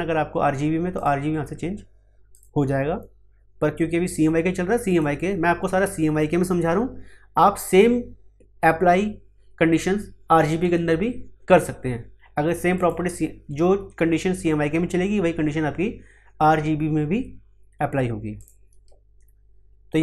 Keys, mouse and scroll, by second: 4.8 click, 12.7 click, 18.3 click.